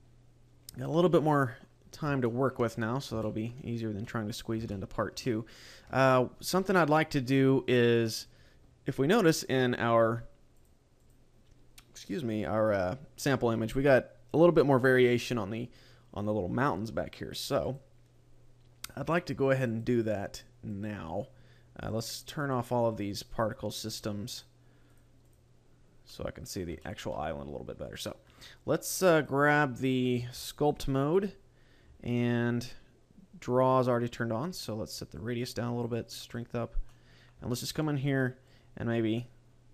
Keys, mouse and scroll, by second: 0.9 middle click, 1.9 scroll up 2, 2.3 shift+middle click, 2.7-3.1 scroll up 4, 3.3 shift+middle click, 3.7-4.1 scroll up 2, 4.1 middle click, 4.7 shift+middle click, 5.3 middle click, 19.7 click, 20.7 click, 21.9 click, 22.5 click, 22.9 click, 23.4 click, 23.8 click, 24.3 click, 25.0 click, 25.3 click, 25.8 click, 26.1 middle click, 26.9 shift+middle click, 27.3 scroll up 2, 27.9 right click, 29.2 click, 30.9 click, 31.8 scroll up 6, 35.2 click, 36.1 click, 36.6-36.9 scroll down 3, 36.9 middle click, 37.5 shift+middle click, 38.0 scroll up 4, 38.5 click.